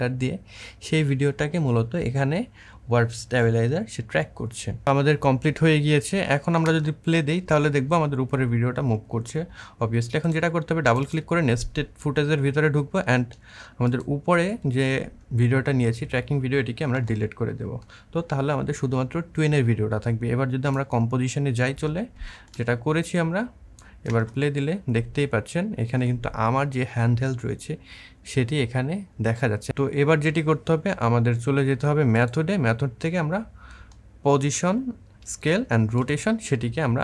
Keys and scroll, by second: 6.5 space, 16.7 Delete, 23.9 space.